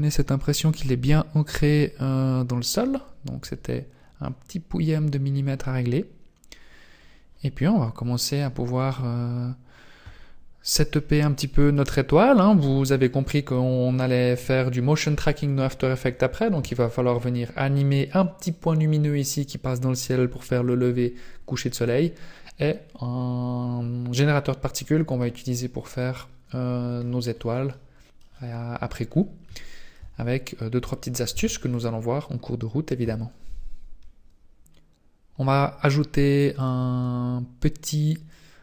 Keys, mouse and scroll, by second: 2.6 scroll down 2, 2.7 scroll down 3, 4.2 scroll down 4, 4.9-5.3 scroll down 2, 6.3-8.0 scroll up 1, 8.0 scroll down 1, 8.4 scroll up 4, 27.0-27.5 scroll down 9, 27.6 middle click, 28.2-29.1 scroll down 2, 29.1-29.5 scroll down 2, 29.5 shift+middle click, 30.2-30.6 scroll down 1, 31.3 ctrl+s, 33.6 scroll down 10, 34.6 right click, 36.5 click.